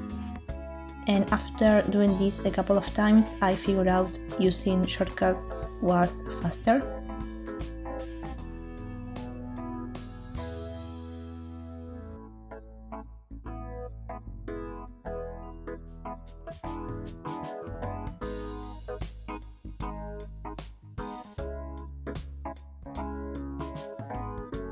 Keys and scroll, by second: 5.4 shift+space, 11.1 shift+space, 17.9 shift+space.